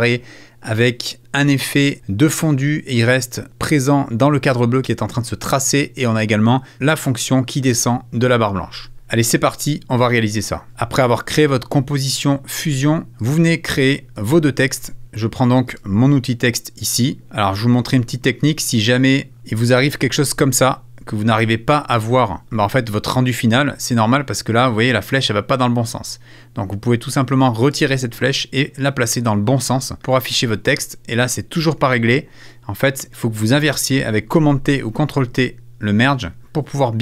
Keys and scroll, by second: 34.3 super+t.